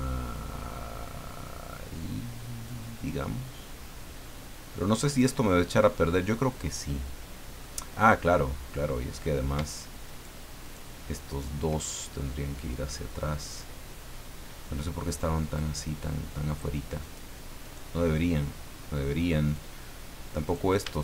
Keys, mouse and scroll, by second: 0.3-2.8 drag, 3.7-5.3 drag, 5.9-7.8 middle drag, 10.0 shift+right click, 10.6 shift+right click, 11.3 shift+right click, 13.5-15.7 drag, 17.0 right click, 17.6 right click, 18.3-19.7 drag, 20.4 right click.